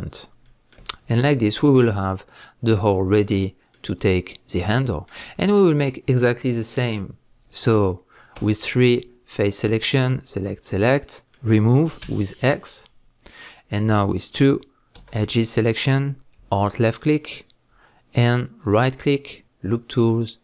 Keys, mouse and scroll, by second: 0.4-9.4 middle drag, 0.9-1.6 scroll down 1, 2.0 scroll up 1, 8.4 3, 9.4 click, 10.3 shift+drag, 10.7-12.0 middle drag, 12.0 x, 16.8 alt+click, 18.6-20.4 right drag.